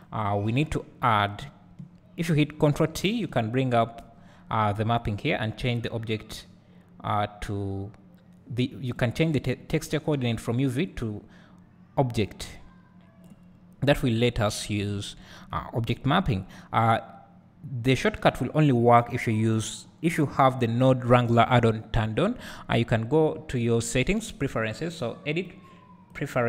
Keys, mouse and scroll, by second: 0.6-26.2 drag, 3.0 ctrl+t.